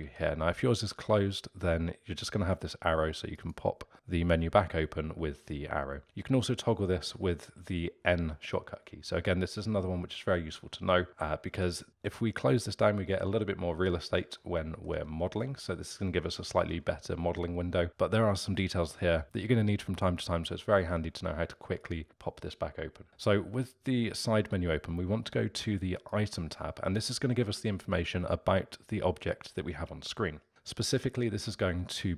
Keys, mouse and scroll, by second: 0.0 n, 3.3-6.0 drag, 6.8 n, 7.5 n, 11.5 n, 14.4-16.4 middle drag, 16.4-16.7 scroll down 3, 16.7-17.9 scroll up 3, 17.9 n, 25.9 click.